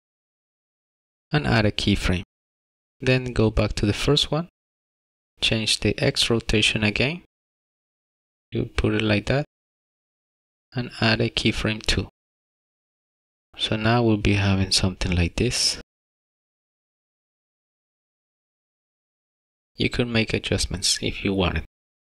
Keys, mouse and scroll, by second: 0.1 click, 3.2 click, 5.3 click, 7.6 click, 12.2 click, 15.4 click, 21.1 click, 21.9 click.